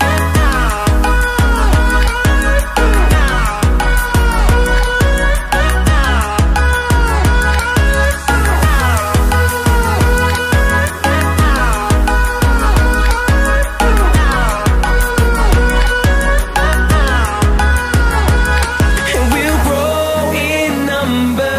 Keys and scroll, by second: 1.9 ctrl+t.